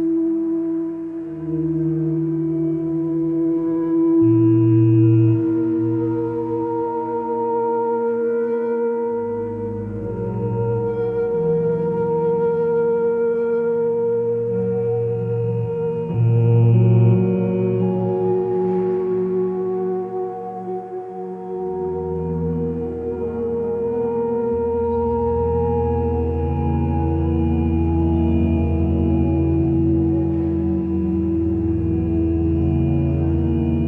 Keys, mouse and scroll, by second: 0.0 ctrl+space, 10.5 ctrl+j, 10.7 ctrl+j, 10.9 ctrl+j, 11.0 ctrl+j, 11.2 ctrl+j, 11.4 ctrl+j, 15.5 ctrl+z, 20.2 BackSpace, 21.6 Right, 22.0-23.2 typing, 23.5 Return, 24.9 ctrl+t.